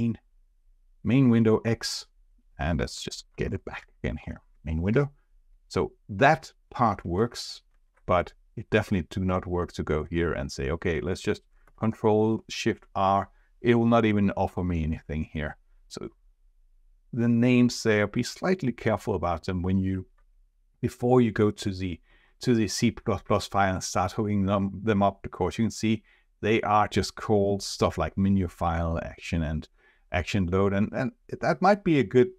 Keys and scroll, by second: 3.3 ctrl+shift+r, 7.9 ctrl+Tab, 11.6 ctrl+shift+r, 23.7 ctrl+Tab.